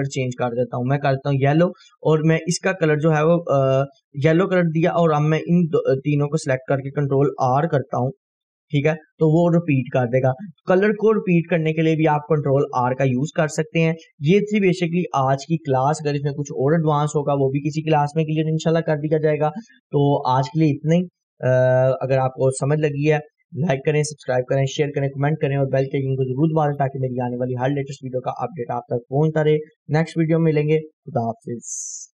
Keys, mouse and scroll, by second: 0.7-3.1 drag, 8.5 ctrl+r, 14.8 F4.